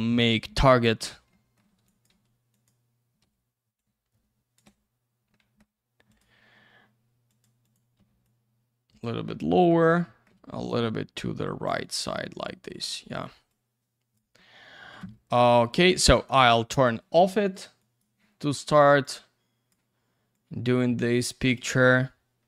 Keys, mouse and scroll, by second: 0.2 click, 0.2 click, 1.8 click, 2.5 click, 3.2 w, 3.7 click, 5.4 alt+middle click, 6.1 click, 6.1 click, 7.3 click, 7.4 click, 7.6 click, 7.7 click, 8.2 click, 9.3 alt+middle click, 10.8 click, 11.9 click, 12.0 click, 12.2 alt+middle click, 13.5 click, 14.4 alt+middle click, 16.3 click, 16.4 click, 17.8 click, 19.0 click, 20.3 click.